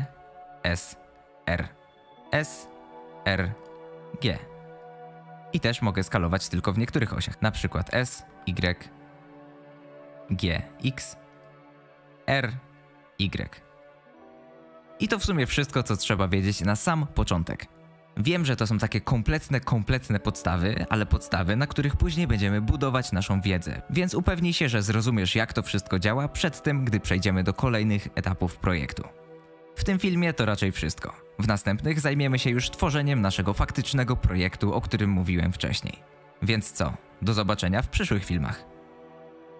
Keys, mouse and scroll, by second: 0.2 s, 0.9 r, 2.1 s, 2.9 r, 4.2 g, 7.9 s, 10.1 g, 12.1 r.